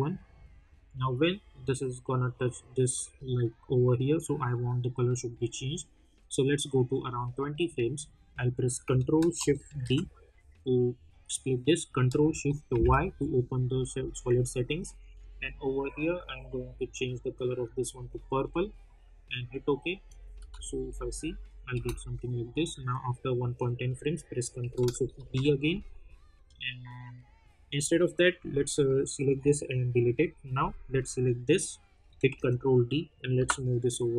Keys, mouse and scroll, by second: 0.6-5.2 drag, 5.2-9.7 drag, 9.7 ctrl+shift+d, 12.7 ctrl+shift+y, 15.1 click, 20.3 space, 22.6-25.1 drag, 25.1 ctrl+shift+d, 28.7 click, 30.9 click, 32.2 ctrl+d, 33.3 [.